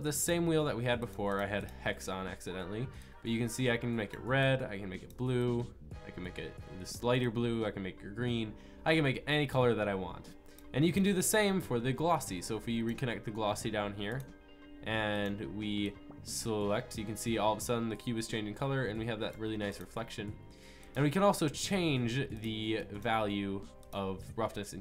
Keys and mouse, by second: 11.6-13.6 drag, 14.1-16.9 drag, 20.0-23.8 drag.